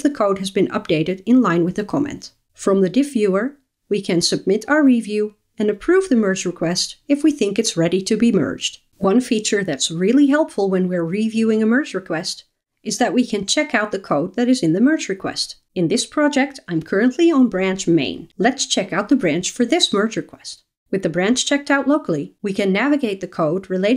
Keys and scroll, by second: 21.7 super+9.